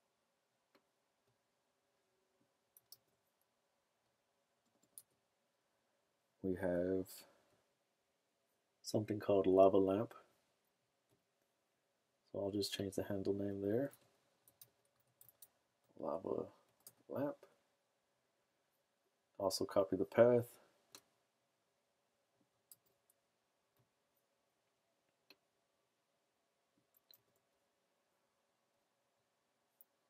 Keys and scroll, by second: 2.9 super+c, 5.1 super+v, 13.9-17.3 typing, 22.7 super+c, 27.1 super+v.